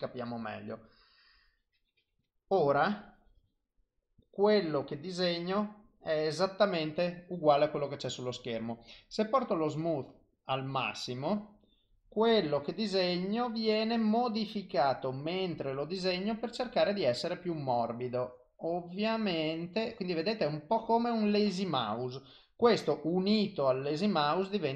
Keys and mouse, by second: 1.5 click, 2.8 click, 9.1 click, 10.7 click, 16.1 click, 21.8 click.